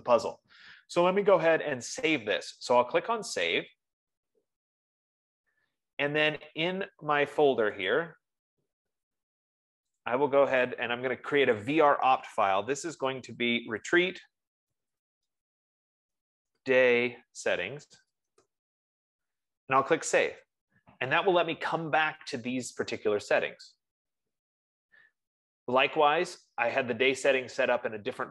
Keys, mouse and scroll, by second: 4.1-7.4 drag, 8.5 click, 10.5 click, 12.1 click, 13.9-19.3 typing, 17.7-19.2 drag, 20.9 click, 22.4-25.8 drag.